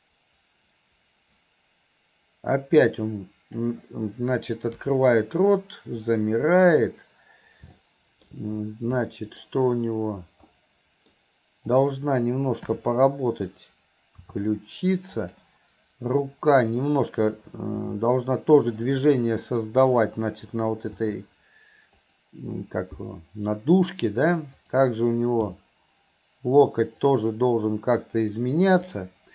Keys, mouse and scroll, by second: 7.8-8.3 middle drag, 9.0-9.5 middle drag, 10.5-11.1 middle drag, 11.7 click, 16.6 click, 24.6 click, 28.9 click.